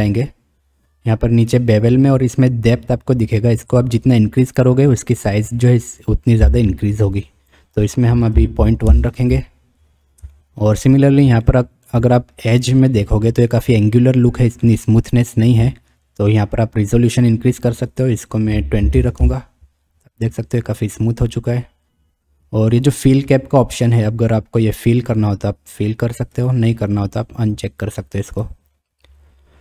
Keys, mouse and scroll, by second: 4.0-7.5 drag, 7.8-9.6 middle drag, 10.4 shift+middle drag, 11.4-11.9 shift+middle drag, 12.6-12.9 middle drag, 14.7 middle click, 17.9-19.7 drag, 23.7 click, 26.4 click, 28.4 click.